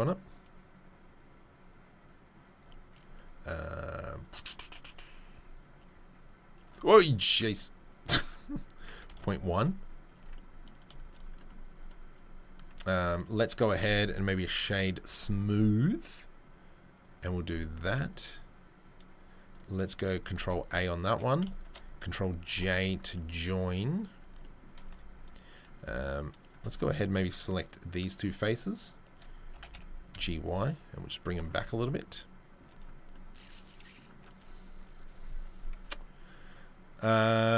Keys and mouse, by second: 2.4-7.9 drag, 7.9 middle click, 8.1-12.1 drag, 10.1 Tab, 12.1-13.7 middle drag, 14.7 space, 16.1 click, 16.9 click, 18.0 click, 19.8 click, 20.4 ctrl+a, 21.5 shift+right click, 22.5 ctrl+j, 23.3-23.9 middle drag, 23.9 click, 24.0-26.4 middle drag, 24.2 Tab, 24.9 3, 26.4 click, 26.5-27.9 shift+middle drag, 27.9 shift+right click, 28.0 shift+middle click, 28.6 shift+right click, 28.7-37.5 shift+middle drag, 31.5 Tab.